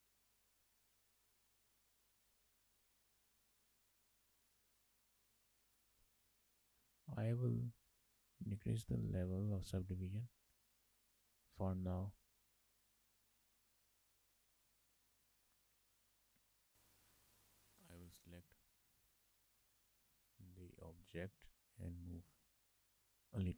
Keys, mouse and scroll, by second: 1.7 click, 5.0 click, 7.8 click, 8.5 click, 9.4 shift+middle click, 9.9 scroll down 2, 10.1 shift+middle click, 12.5 click, 13.7 shift+middle click, 16.7 middle click, 18.2 click, 19.1 middle click, 19.9 middle click, 20.3 shift+middle click, 21.6 click.